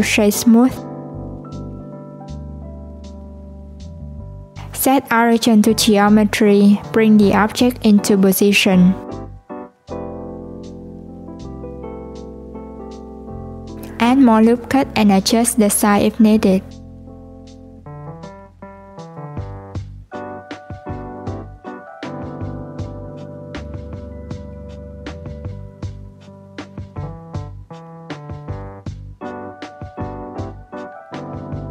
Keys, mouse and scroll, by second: 1.3 /, 2.9 click, 4.5 right click, 6.6 click, 9.5 Tab, 10.4 alt+z, 11.3 click, 13.4 click, 18.6 ctrl+r, 19.6-26.5 ctrl+r, 27.6 Tab, 28.9 s.